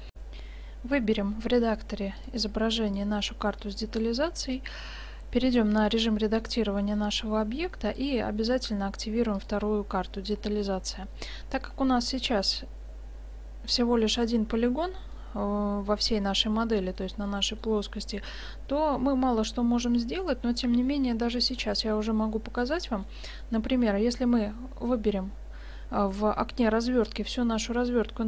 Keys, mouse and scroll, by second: 0.2 F9, 2.2-4.0 drag, 4.5-6.2 middle drag, 5.1 Tab, 8.0-11.2 drag, 11.3-13.7 middle drag, 14.2-15.7 middle drag, 18.3 middle click, 21.3-22.9 middle drag, 23.0 middle click, 23.4 click, 23.5 middle click, 23.6 click, 23.6-27.0 middle drag, 27.7 s.